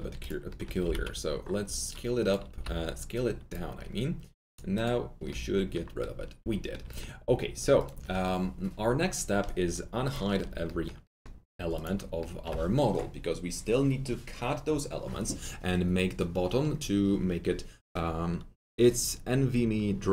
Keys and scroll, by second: 0.8 alt+t, 0.8 alt+z, 2.4 r.